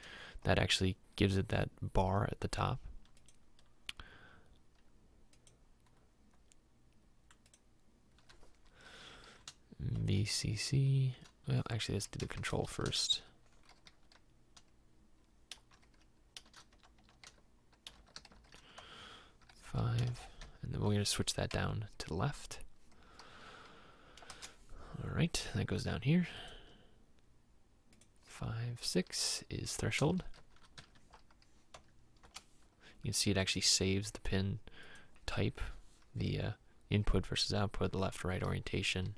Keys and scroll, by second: 10.1 shift+v, 10.8 shift+c, 12.3-14.0 typing, 15.6-18.3 typing, 18.9 Tab, 19.5 4, 20.0 BackSpace, 20.2 5, 20.5 Tab, 21.6 Down, 24.4 Return, 30.2 shift+h, 30.5 shift+r, 30.8 Tab, 31.2 6, 31.8 Tab, 32.3 Return.